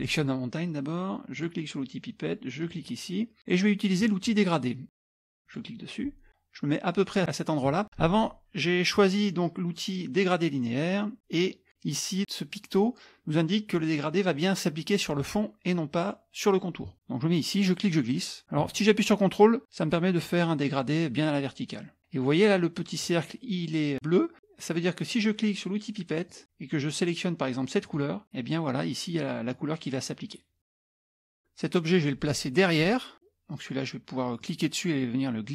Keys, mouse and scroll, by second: 1.4 click, 2.6 click, 5.3 click, 17.9-22.0 drag, 26.3 click, 27.8 click, 31.2 click, 34.4-35.5 drag.